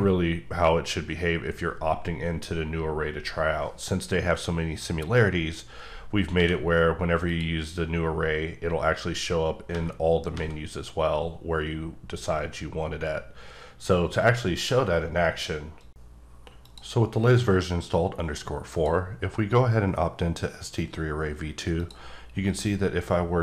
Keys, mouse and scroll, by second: 6.1 scroll down 1, 6.4 q, 7.2 click, 8.3-9.7 scroll up 1, 9.7 v, 12.4 v, 14.5 right click, 18.7 click, 21.7 click.